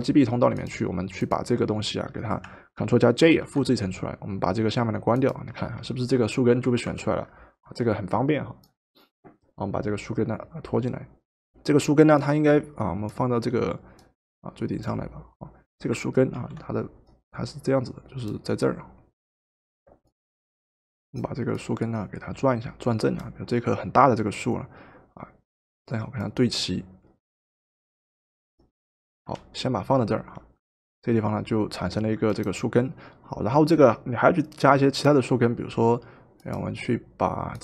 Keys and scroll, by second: 3.2 ctrl+j, 6.7 v, 16.4 ctrl+t, 29.2 Return.